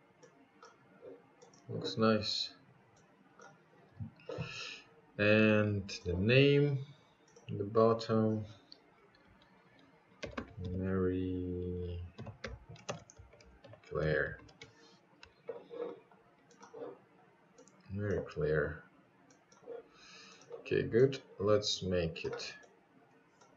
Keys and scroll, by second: 4.6-5.5 typing, 6.8 shift+r, 7.1 shift+y, 7.6 space, 7.9 shift+c, 9.0 shift+r, 18.8 Return.